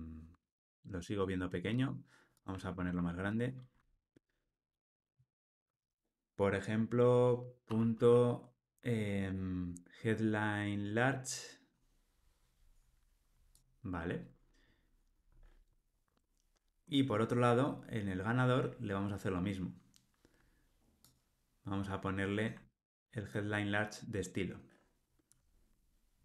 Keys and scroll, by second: 2.7 alt+Return, 22.6 super+c.